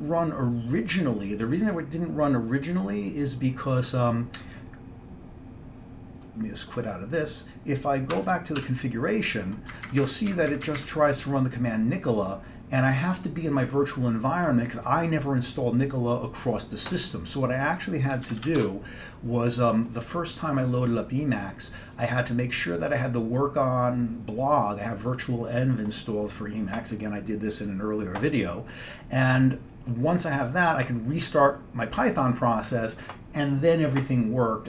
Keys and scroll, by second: 7.3 q, 8.2 Escape, 8.4 Escape, 8.7 c, 9.4 Down, 9.8 Up, 9.9 Up, 10.1 Up, 10.4 Down, 10.6 Up, 10.7 Up, 10.9 Up, 18.3 ctrl+x, 18.5 b, 18.7 Return.